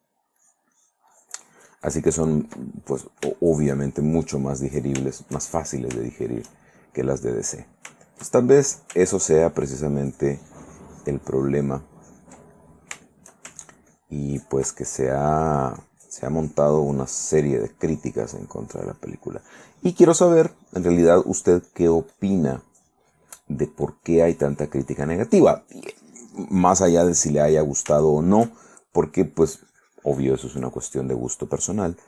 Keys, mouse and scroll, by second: 0.6-2.9 ctrl+drag, 3.0 ctrl+middle click, 3.5-5.0 ctrl+shift+middle drag, 5.2-6.2 shift+middle drag, 7.4-8.9 shift+middle drag, 9.4-12.6 ctrl+drag, 12.7 ctrl+middle click, 13.2 ctrl+shift+middle click, 13.8 ctrl+shift+click, 14.9-25.7 ctrl+shift+drag, 26.7 right click, 27.1-28.7 middle drag, 28.8 shift+middle click, 29.6-31.2 drag, 31.3-32.0 drag.